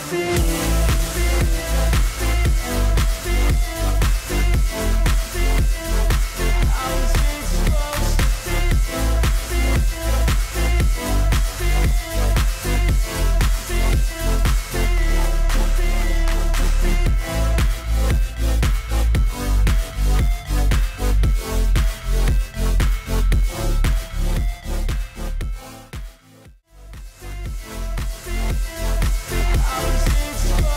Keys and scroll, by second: 2.7 ctrl+t, 16.2 ctrl+t, 20.6 ctrl+d, 23.6 ctrl+t, 29.8 ctrl+d.